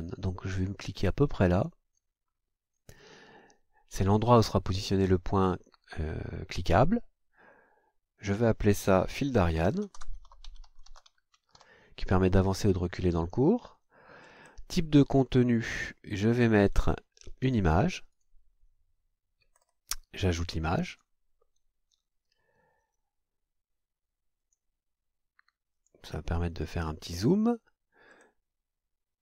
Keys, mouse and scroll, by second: 1.5 click, 8.3 click, 9.1-12.1 typing, 14.2-14.7 scroll down 1, 15.3 click, 18.1 click, 19.5-20.8 scroll down 2, 20.8 click, 24.4 click, 25.7 click, 28.0-28.4 scroll down 1, 29.2 click.